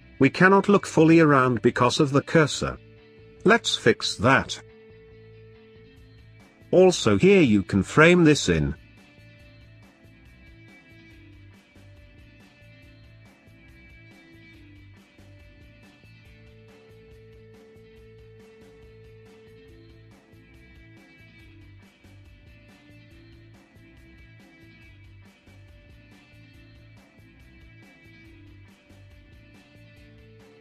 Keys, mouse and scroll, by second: 2.6-2.9 scroll down 3, 2.9-5.6 middle drag, 5.6 click, 8.0 ctrl+j, 8.8 click, 10.3-13.6 drag, 13.6 space, 14.9 BackSpace, 15.1 BackSpace, 17.9 BackSpace, 18.7-21.3 drag, 21.3 scroll down 2, 21.6 middle click, 22.5 click, 23.6-26.6 middle drag, 27.4 ctrl+s.